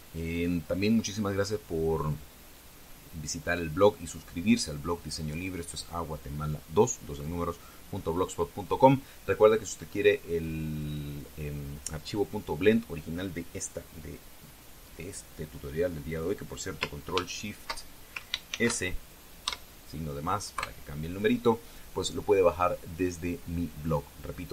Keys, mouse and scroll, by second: 19.3 ctrl+shift+s, 20.2 KP_Add, 21.3 KP_Enter.